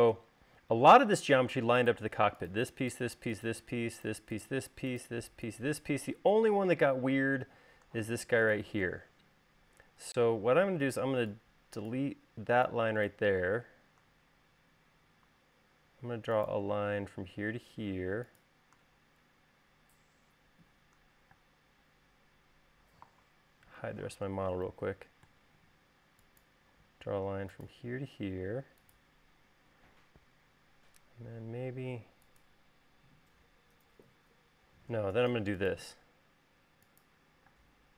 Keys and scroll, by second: 10.4 e, 14.4 l, 21.9 space, 24.4 q, 26.2 e, 27.4 l, 35.2 l.